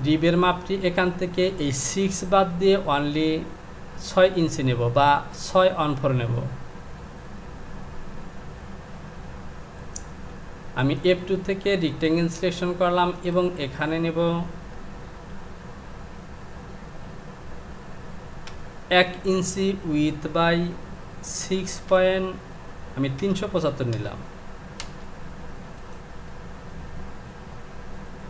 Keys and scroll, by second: 15.3 Down, 18.5 KP_1, 27.4 Home.